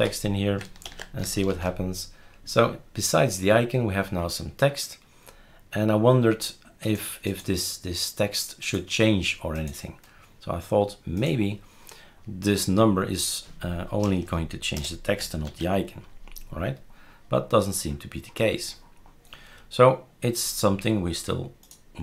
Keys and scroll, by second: 0.0-0.4 typing, 0.8 ctrl+s, 1.5 shift+super+r, 14.0 BackSpace, 14.2 BackSpace, 14.7 BackSpace, 15.4 ctrl+s.